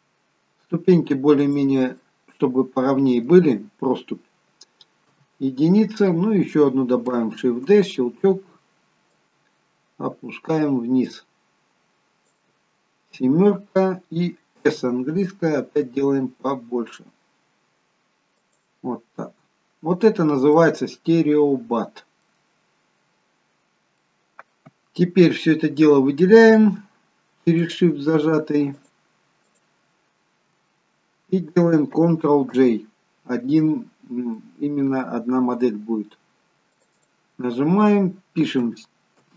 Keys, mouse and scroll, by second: 2.0 middle click, 5.0 KP_1, 7.4 shift+d, 9.1 click, 13.1 KP_7, 14.7 s, 19.2 middle click, 20.6 middle click, 24.0 middle click, 24.0-24.7 scroll down 2, 24.7-25.5 scroll up 1, 25.5-26.8 scroll down 1, 27.5 shift+click, 30.6 shift+click, 33.1 ctrl+j, 34.9 middle click, 36.9 click, 37.1 click.